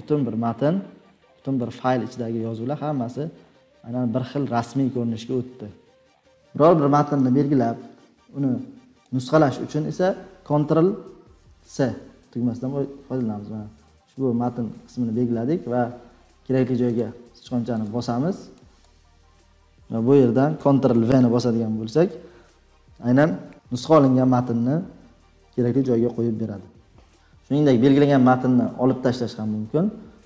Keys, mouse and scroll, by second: 1.6 click, 2.1-2.4 scroll, 2.5-5.2 scroll down 52, 5.2-6.2 scroll, 8.9 click, 11.5 ctrl+c, 14.4-16.2 scroll down 27, 16.9 click, 17.8 click, 18.8 click, 18.8 scroll, 19.5 Tab, 19.5 BackSpace, 20.9 ctrl+v, 27.1 scroll down 3, 27.8 click.